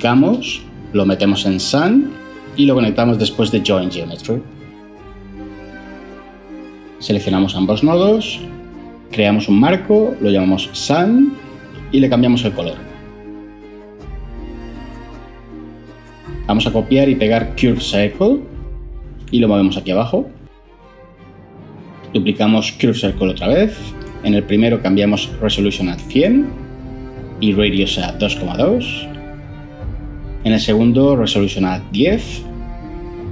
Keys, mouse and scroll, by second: 0.2 shift+d, 9.2 ctrl+j, 9.4 F2, 9.6 typing, 10.1 Return, 17.5 ctrl+c, 18.3 ctrl+v, 22.6 shift+d, 25.4-25.9 typing, 28.5-29.2 typing, 31.8-32.4 typing.